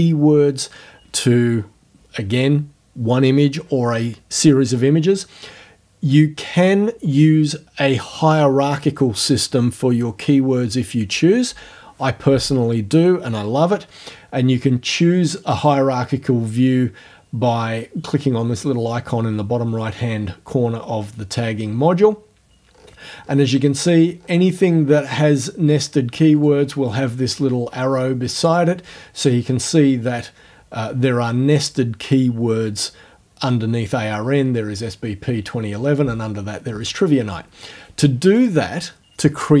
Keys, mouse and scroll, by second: 15.4 click, 22.7-23.0 scroll down 2, 23.8-24.8 scroll down 6, 26.4 click, 28.4 click, 38.4 click.